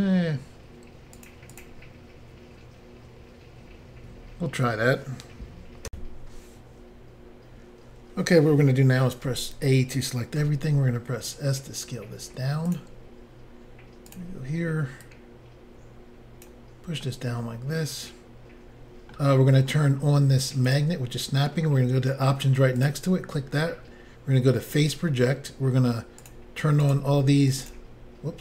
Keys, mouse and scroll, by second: 1.2 click, 1.2 click, 1.6 click, 1.6 double click, 5.9 Insert, 9.3 a, 10.4 s, 12.7 click, 14.1 click, 14.2 click, 15.0 click, 17.0 middle click, 20.7 click, 20.7 click, 22.8 click, 22.9 click, 24.7 click, 24.7 click, 26.2 click, 26.3 click, 26.8 click, 26.9 click, 27.5 click, 27.7 click.